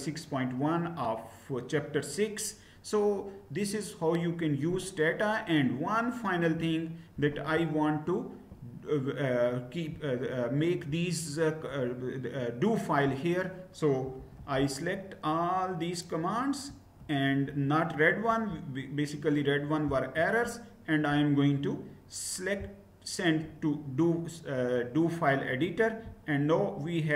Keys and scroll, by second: 13.9 shift+Down, 14.0-16.7 shift+Down, 16.7 shift+Up, 16.9 shift+Up.